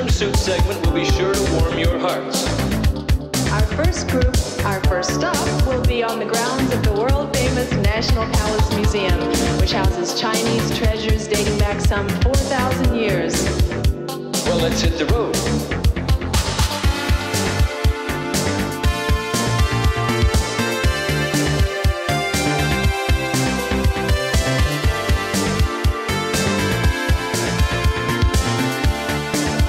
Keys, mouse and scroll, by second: 2.0 space, 2.7 End, 4.0 space, 5.3 Return, 6.7 click, 7.5 right click, 11.5-13.0 scroll down 1, 13.0-13.7 scroll up 1, 13.7 right click, 16.0 click, 24.0 right click, 24.4-25.4 scroll up 1, 25.4 click, 25.6 right click, 26.7 click.